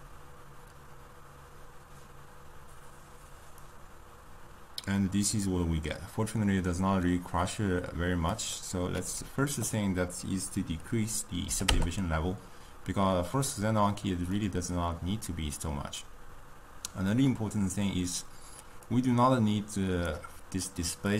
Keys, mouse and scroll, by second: 9.2-13.4 drag, 14.9-18.1 middle drag, 19.2-21.1 drag.